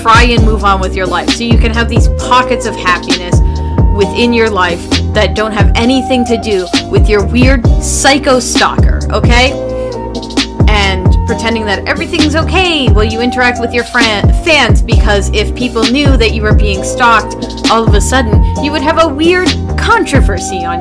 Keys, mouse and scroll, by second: 1.4 space, 2.6 space, 6.1 space, 7.4 space, 7.7 space, 18.1 [, 20.5 right click.